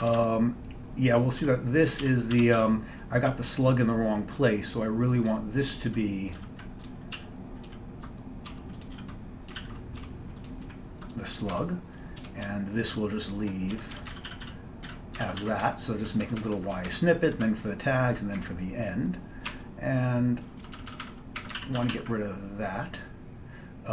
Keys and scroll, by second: 0.0-0.2 typing, 0.2 ctrl+n, 1.5-3.6 typing, 5.4 ctrl+p, 5.7 ctrl+f, 6.0 ctrl+f, 6.4 ctrl+b, 7.2-9.0 typing, 9.7 ctrl+d, 10.1 End, 10.7 }, 11.6 Down, 12.3 BackSpace, 12.5-13.5 Left, 13.6 Left, 13.8-16.3 typing, 16.5 Down, 16.6 Down, 16.8 Down, 17.0 Down, 17.5-18.4 Down, 18.4-19.6 Up, 19.5 typing, 19.6 Home, 20.7 Down, 20.8 Down, 21.5 Down, 21.7 ctrl+d, 21.9 ctrl+x, 22.0 ctrl+s.